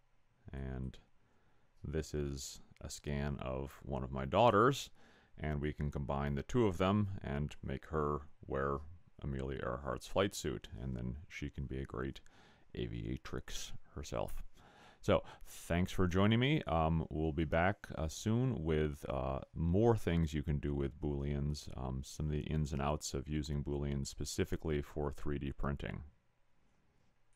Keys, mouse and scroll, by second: 0.8 click.